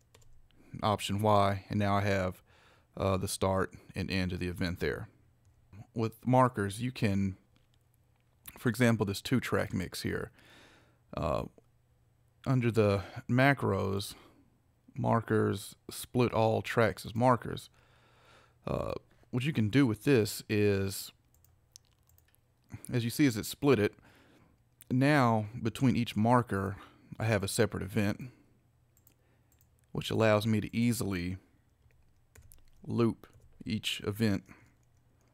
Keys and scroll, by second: 0.2 alt+y, 32.4 shift+p, 33.3 shift+Right.